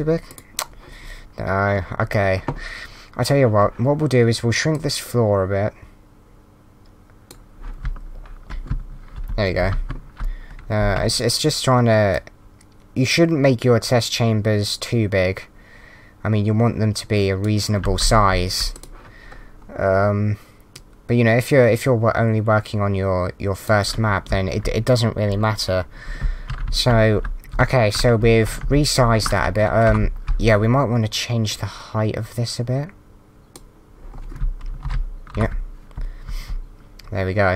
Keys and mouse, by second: 4.7 click, 7.6-10.8 typing, 12.1 click, 17.8 a, 18.2 s, 18.7 click, 20.8 click, 24.0-24.8 typing, 25.8-30.0 typing, 29.9 Up, 31.5 click, 34.1-35.5 typing.